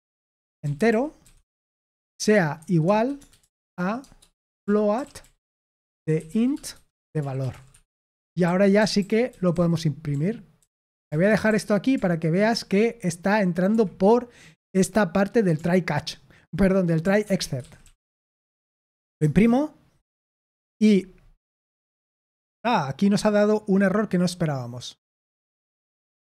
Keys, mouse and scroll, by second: 0.0-12.4 typing, 13.6 Escape, 17.2-18.3 typing, 18.5 ctrl+p, 19.1 Return.